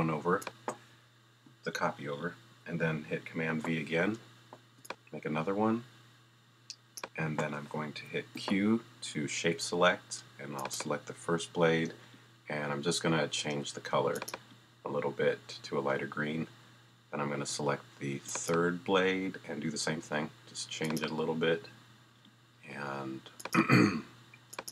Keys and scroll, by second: 3.5 super+v, 8.3 shift+q.